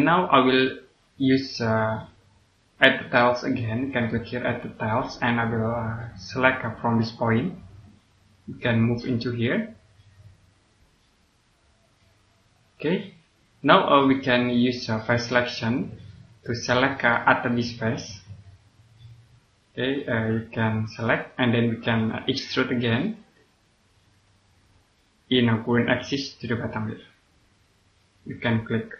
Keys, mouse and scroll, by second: 4.6 click, 5.6-7.7 scroll up 1, 8.2 click, 14.0 middle click, 15.4 click, 17.0 middle click, 18.1 click, 24.5 scroll down 1, 24.8 click.